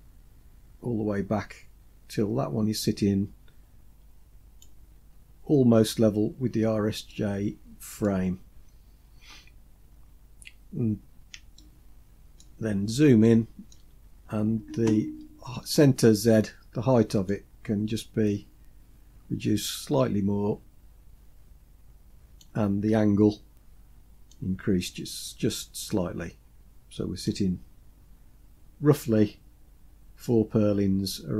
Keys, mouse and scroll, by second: 6.1-6.6 scroll up 3, 7.1-8.1 shift+middle drag, 8.5-9.3 scroll up 2, 11.6-12.4 shift+middle drag, 12.7-13.1 scroll up 3, 13.2-13.8 shift+middle drag, 14.0-14.3 scroll up 3, 17.3-22.4 drag, 24.3-27.4 drag, 27.6-29.0 scroll down 4, 29.0-29.8 scroll down 1.